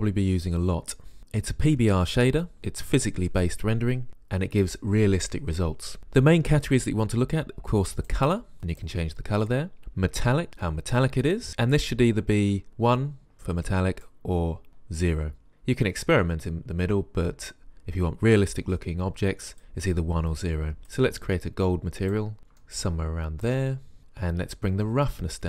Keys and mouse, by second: 8.2-8.6 drag, 13.8 click, 14.4 click, 17.0 click, 17.4 click.